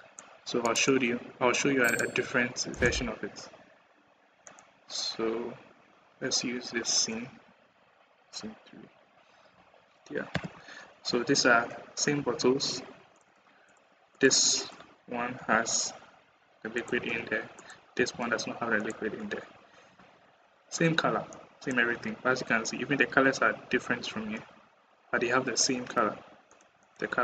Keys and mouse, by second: 10.1 KP_0, 13.0 click, 13.5 click, 15.2 g, 17.4 click, 17.8 g, 21.2 click, 26.6 click.